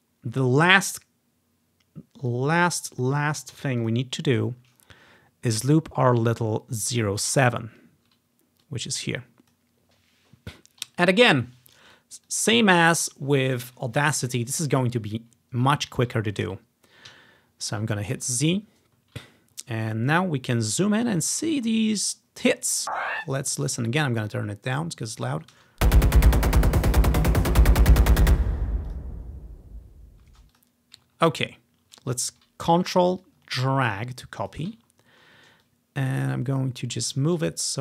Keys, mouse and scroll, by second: 2.4 click, 3.9 click, 5.2-5.9 scroll down 1, 6.0 scroll up 2, 7.4 ctrl+scroll down 3, 8.8 click, 10.8-11.7 scroll up 5, 12.4 ctrl+click, 15.7-16.1 ctrl+scroll up 1, 17.2 z, 18.2-19.2 drag, 19.8-20.1 scroll up 2, 20.9 scroll up 1, 21.5 scroll down 1, 23.2 ctrl+z, 23.5 click, 24.2-25.3 drag, 25.7 space, 25.9 click, 27.9 typing, 29.0 click, 30.4 space, 30.6 click, 31.1-32.9 ctrl+drag, 31.3-31.7 ctrl+scroll up 2, 31.7 ctrl+scroll down 2, 33.3-34.6 drag, 35.1-36.2 scroll up 2, 35.7-37.8 drag.